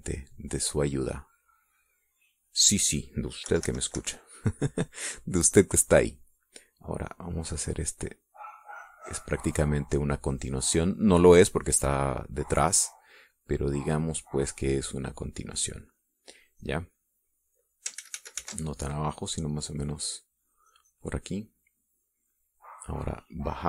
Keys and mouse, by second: 1.7-3.1 drag, 3.4 click, 4.5 KP_Subtract, 5.4-6.7 middle drag, 8.3 click, 9.4-10.8 drag, 11.3-13.1 drag, 14.3-18.1 drag, 19.1 ctrl+z, 19.9-23.1 ctrl+drag.